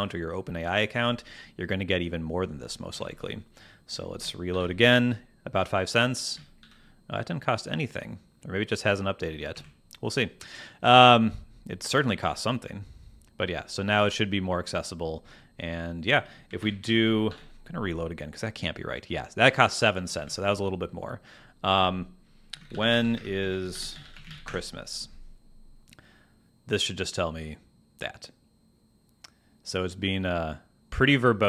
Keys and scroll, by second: 2.9 super+Tab, 4.5 super+r, 6.7 super+r, 9.5 super+Tab, 16.5 super+n, 16.9 super+Tab, 17.3 super+r, 20.1 super+Tab, 22.8 n, 22.9 space, 24.4 Return.